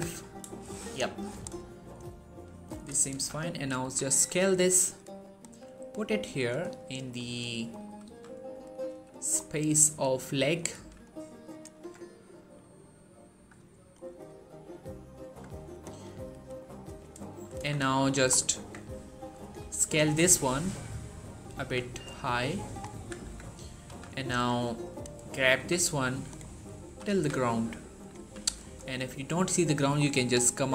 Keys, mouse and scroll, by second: 1.2 click, 1.5-1.8 scroll down 1, 1.8-2.8 middle click, 2.5 1, 3.0 z, 3.3-3.7 scroll up 1, 3.7 s, 5.0 click, 5.3 g, 6.2 click, 6.5 scroll up 1, 7.0 z, 7.5 scroll up 1, 7.9 s, 8.5 click, 8.7 g, 9.0 click, 9.2 scroll down 1, 9.3-9.9 middle click, 9.8-10.2 scroll up 1, 10.2 middle click, 10.6 1, 11.4 click, 11.6 Tab, 12.0-12.6 middle drag, 14.1 1, 15.0 Tab, 15.6 click, 15.9 g, 16.3 right click, 17.1 shift+middle click, 17.4 z, 17.7-18.1 scroll down 1, 18.1 scroll up 1, 18.4 Tab, 19.0 click, 19.5 s, 21.3 click, 21.5 z, 22.0-22.6 middle click, 22.8 1, 23.0 Tab, 23.7 z, 24.2 Tab, 24.7 click, 25.0 scroll down 1, 25.2 shift+middle click, 26.1 right click, 26.7 typing, 27.8 click, 28.0 3, 28.5 shift+middle click, 28.5 shift+scroll up 1, 29.2 scroll up 1, 29.5 shift+middle click, 29.7-30.2 scroll up 1, 30.3-30.7 shift+middle drag.